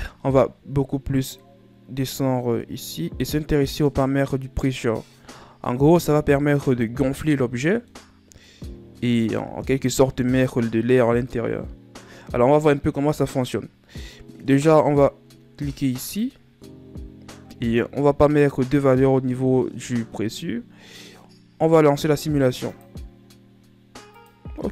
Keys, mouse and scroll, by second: 0.6-1.5 scroll down 4, 1.5-3.3 scroll down 11, 3.3-6.1 scroll down 4, 7.8-12.1 middle drag, 16.7 click, 23.3 click.